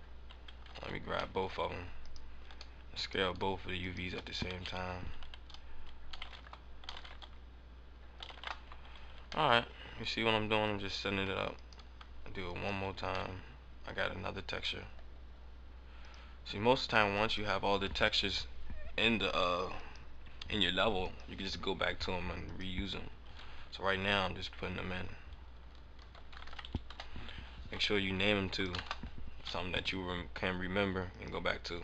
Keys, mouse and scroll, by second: 0.7 ctrl+z, 0.9 ctrl+z, 1.1 scroll up 1, 1.3 middle click, 2.2 shift+right click, 3.0 right click, 4.3 a, 4.7 a, 6.0 s, 6.7 s, 8.1 s, 9.1 Tab, 9.4 middle click, 10.7 scroll down 1, 11.2 Tab, 11.5 right click, 12.4 shift+right click, 13.2 middle click, 14.3-16.0 scroll up 9, 16.0 click, 16.0-16.9 scroll up 3, 17.0 click, 19.7 click, 20.9 click, 26.8 click, 28.4 click, 29.6 click, 31.0 click.